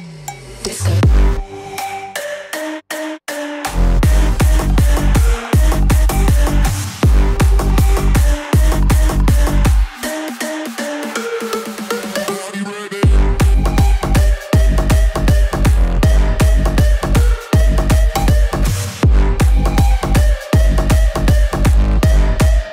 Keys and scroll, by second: 17.7 ctrl+z.